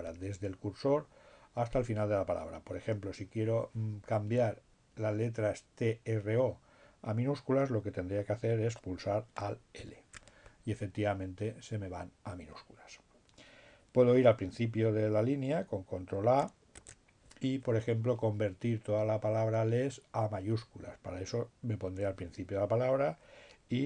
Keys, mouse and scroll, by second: 9.0 alt+l, 13.7 ctrl+a.